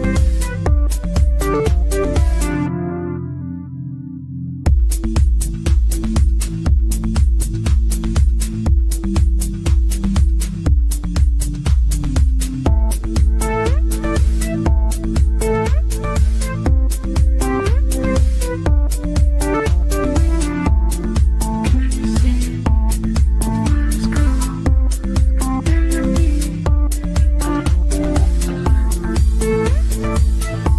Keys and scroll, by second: 7.4 ctrl+z, 15.2 ctrl+z, 22.8 Delete, 24.7 ctrl+shift+a, 26.9 g.